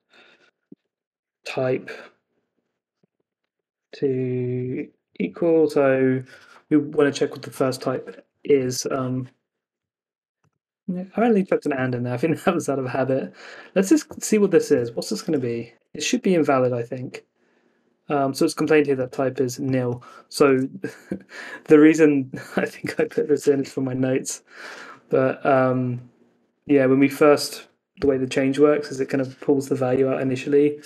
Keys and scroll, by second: 2.9 Right, 5.4 Left, 8.7 Left, 8.8 Escape, 11.6 super+s, 14.6 super+Tab, 15.4 Up, 15.7 Return, 20.4 super+Tab, 22.7 Left, 23.3 Escape, 23.5 super+s.